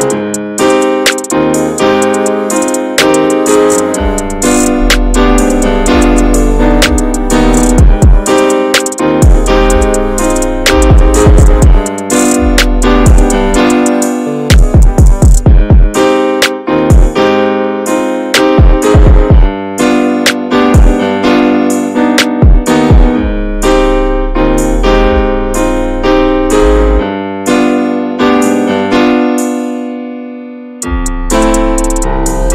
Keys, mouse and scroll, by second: 0.7 ctrl+z, 1.1 ctrl+b, 2.6 scroll down 3, 2.8 middle click, 3.1 Tab, 3.2 drag, 3.4 scroll down 1, 3.5 middle click, 3.9 Tab, 4.5 alt+z, 4.9 shift+middle click, 5.0-5.6 scroll up 2, 5.6 1, 5.9 click, 6.4-7.1 scroll up 2, 7.1 scroll down 2, 7.2 middle click, 7.7 alt+z, 8.0-9.4 middle drag, 9.4 3, 9.6 click, 10.0 shift+click, 10.4 shift+click, 10.7 shift+click, 10.9 shift+click, 11.4 shift+click, 11.8 shift+click, 12.1-13.2 middle drag, 13.2 e, 14.7 click, 15.0 shift+click, 15.4 shift+click, 15.7 shift+click, 16.1 shift+click, 16.5 shift+click, 16.9 middle click, 17.8 e, 18.6 middle click, 19.2-19.6 shift+scroll up 1, 19.6 click, 20.3 middle click, 21.1 click, 21.7 alt+z, 21.9 alt+middle click, 22.7-24.0 drag, 24.4 ctrl+z, 24.6-25.8 ctrl+drag, 26.6 alt+z, 26.8 middle click, 26.9 scroll up 1, 27.2 shift+middle click, 27.9 2, 28.2 click, 28.6 alt+shift+click, 29.4 ctrl+b, 31.7 scroll down 2, 31.9 Tab, 32.0 click, 32.2 middle click.